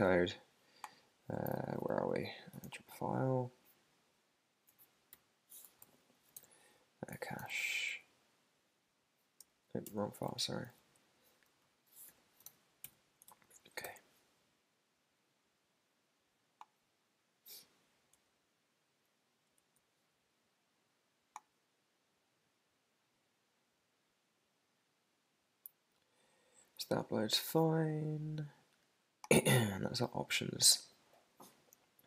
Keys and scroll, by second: 1.6 ctrl+alt+super+Up, 2.6 shift+super+], 3.8 shift+super+], 5.1 super+-, 5.8 super+k, 5.8 super+b, 6.3 super+f, 9.4 Escape, 9.9 shift+super+[, 10.8 super+g, 11.7 super+Left, 12.1 Escape, 12.4 super+/, 12.8 super+s, 13.2 super+Tab, 13.8 super+r, 18.1 super+Tab.